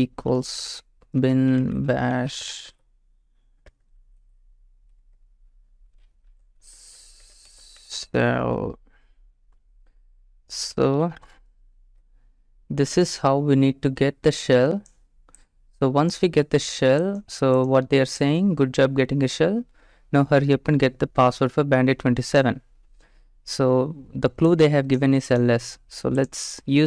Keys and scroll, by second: 0.0-4.7 typing, 5.0 Return, 5.9-8.3 typing, 10.4-12.4 typing, 25.6 alt+Tab.